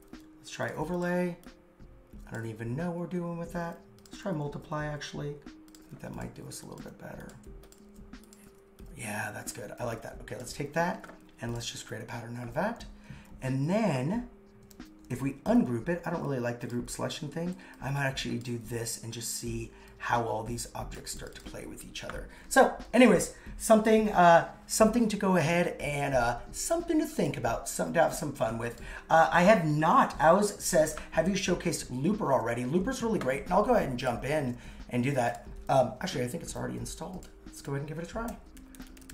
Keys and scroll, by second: 7.5 super+x, 7.8 super+v, 15.5 shift+super+g, 28.1 super+x, 38.3 super+/.